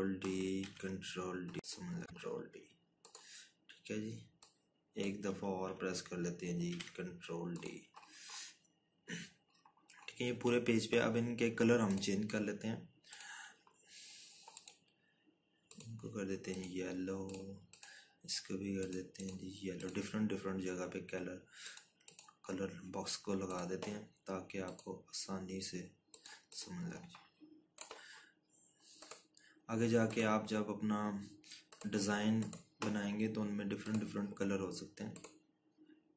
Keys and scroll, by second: 0.2 ctrl+d, 1.6 ctrl+d, 8.5 ctrl+d.